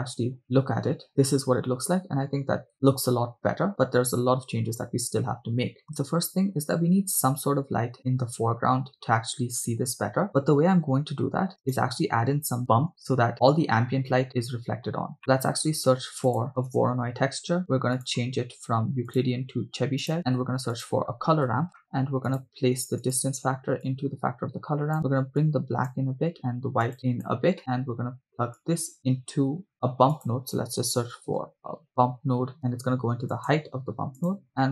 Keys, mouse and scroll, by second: 0.4 KP_0, 2.5 click, 11.9 click, 11.9 right click, 14.8-15.2 scroll down 1, 15.2 middle click, 15.8 shift+a, 18.3 scroll up 1, 19.1-20.2 drag, 20.2 shift+a, 23.9-25.0 drag, 25.4-25.9 drag, 26.8-27.3 drag, 27.6 middle click, 28.6-33.7 drag, 34.2 click.